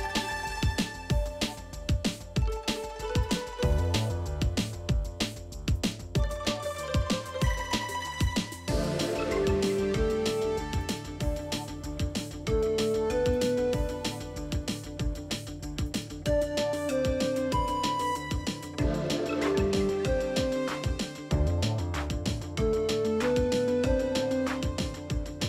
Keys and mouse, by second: 0.2 middle click, 0.6 alt+z, 1.4 1, 1.9 middle click, 2.5 click, 3.0 shift+click, 3.4 f, 3.8 click, 4.3 shift+click, 4.7 f, 5.1 alt+z, 5.3 alt+z, 5.4 middle click, 5.9 click, 6.5 shift+click, 6.9 f, 7.0 middle click, 7.6 click, 8.2 middle click, 8.6 shift+click, 9.2 alt+z, 9.6 middle click, 9.9 Tab, 12.6 middle drag, 13.3 middle drag, 13.8 Tab, 14.3 click, 14.9 g, 15.9 g, 16.4 middle click, 16.8 middle click, 17.9 g, 18.4 middle click, 18.8 middle click, 19.2 g, 19.8 middle click, 20.3 middle click, 21.0 click, 21.2 g, 21.7 middle click, 22.6 g, 23.0 middle click, 23.6 click, 23.8 middle click, 24.2 g, 24.9 middle click.